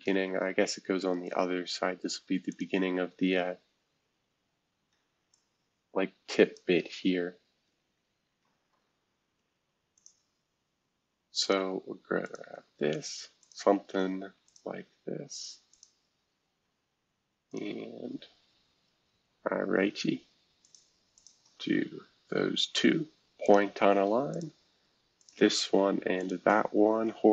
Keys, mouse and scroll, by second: 0.0 Escape, 2.5-4.0 drag, 4.9 F2, 5.3-7.1 drag, 7.1 F2, 8.4 shift+F2, 9.9-11.5 drag, 12.2 click, 13.4 click, 14.5 click, 15.7 click, 17.5 click, 18.4 Escape, 18.9-20.5 scroll up 1, 20.6 click, 21.1 shift+click, 23.4 click, 24.3 click, 25.2 click, 26.2 shift+click.